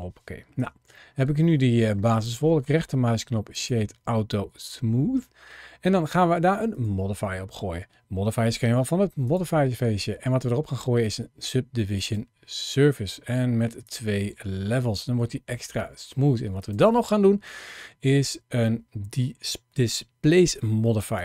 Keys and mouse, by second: 0.4 Tab, 0.9-1.8 middle drag, 2.1-3.5 drag, 4.1-5.4 middle drag, 6.5 click, 9.1-12.3 drag, 13.7 click, 14.9 middle click, 16.4-21.2 drag.